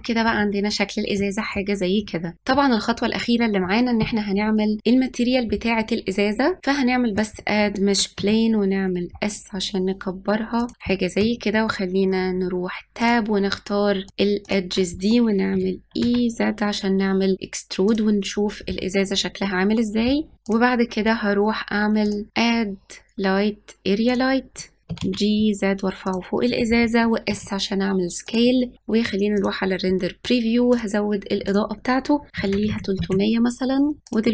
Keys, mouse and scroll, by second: 0.0-0.5 scroll down 6, 0.5-1.2 scroll up 3, 1.2-2.3 middle drag, 6.6-8.2 drag, 8.2 s, 10.7-11.1 scroll up 3, 11.2 Tab, 13.0-14.1 drag, 14.5 shift+click, 15.6 e, 19.1 scroll up 1, 20.3 click, 22.1 click, 22.3-24.8 drag, 24.9 g, 27.3 s, 29.4 click, 30.8 click, 31.5-32.7 drag, 32.7 KP_0, 34.1 shift+click.